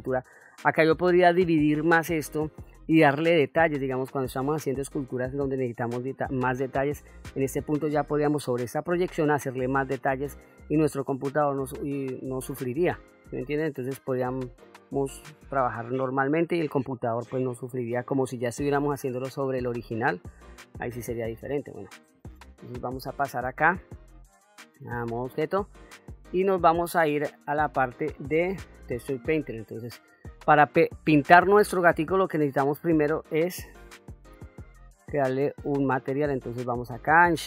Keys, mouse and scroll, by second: 3.9 middle click, 4.8 middle click, 8.8 middle click, 10.7 middle click, 12.7 middle click, 13.9 middle click, 14.9 middle click, 20.9 middle click, 23.1 ctrl+Tab, 27.5 shift+middle click, 28.4 middle click, 29.3 middle click, 31.5-33.0 drag, 34.1-34.8 shift+middle drag, 36.1-37.4 drag.